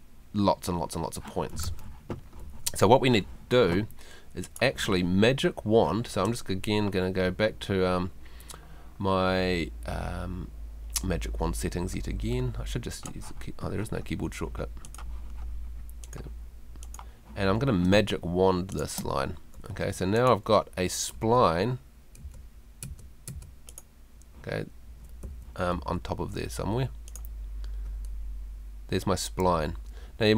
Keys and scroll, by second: 17.9 space, 19.7 Escape, 21.2 Tab, 24.9 Escape.